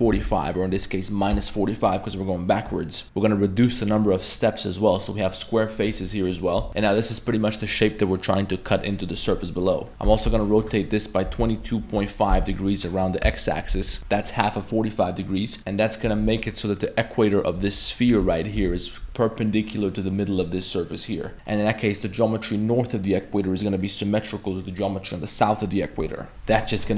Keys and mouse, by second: 3.7 click, 3.9 click, 4.1 click, 4.2 click, 5.0 middle drag, 5.9 middle drag, 6.4 middle click, 6.6 a, 6.8 ctrl+z, 6.8 middle click, 6.8 g, 8.0-8.5 middle drag, 9.7 middle click, 9.9 ctrl+z, 10.1 r, 13.7 z, 14.0 z, 15.5 middle click, 15.6 2, 15.6 a, 16.1 2, 17.3 alt+right click, 17.7 middle click, 18.1 3, 18.6 2, 18.8 alt+right click, 19.3 middle drag, 20.7-21.5 middle drag, 23.3 middle click, 23.8 middle click, 24.6 middle click, 26.3 middle click, 26.3 a.